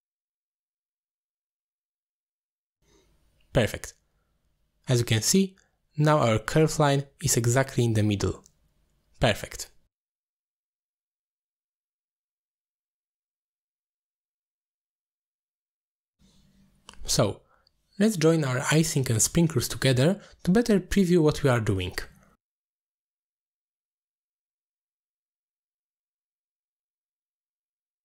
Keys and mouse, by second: 1.1 middle click, 2.0-2.5 drag, 3.0 click, 3.2-3.7 drag, 4.3 click, 4.5 click, 5.0 click, 5.6 middle click, 6.1 click, 7.0-8.3 drag, 8.8 click, 10.4 middle drag, 11.4 middle click, 12.2-14.1 shift+drag, 14.7 ctrl+z, 15.4 ctrl+z, 17.1 shift+b, 18.0 shift+b, 19.2 click, 19.6 shift+drag, 22.1 middle click, 22.8-23.4 drag, 23.7 click, 24.3 alt+shift+click, 26.0 middle click, 26.7 click, 27.5 drag.